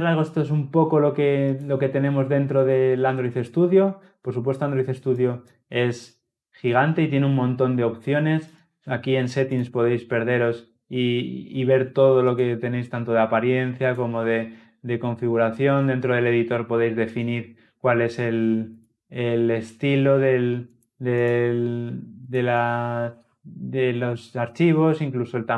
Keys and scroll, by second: 1.4 ctrl+F2, 9.5 ctrl+alt+s.